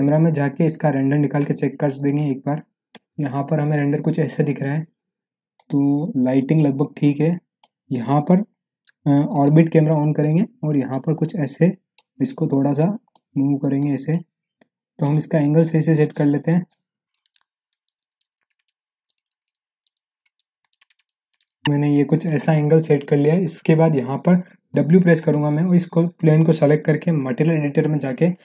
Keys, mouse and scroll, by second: 0.0 c, 2.0 click, 5.5 click, 7.6 middle click, 9.3 click, 11.2-12.1 middle drag, 13.1-14.0 click, 14.1-15.2 middle drag, 15.9-16.4 scroll up 1, 16.4-17.1 click, 17.1 middle click, 17.2 click, 17.3 middle click, 17.5-18.0 scroll up 2, 17.8 alt+z, 17.8 click, 18.1 scroll down 1, 18.2 click, 18.4-18.7 middle click, 19.1 click, 19.3 middle click, 19.8 click, 20.0 middle click, 20.3 click, 20.8 click, 21.1 middle click, 21.4-22.5 drag, 24.7 w, 25.1 click, 27.0 m.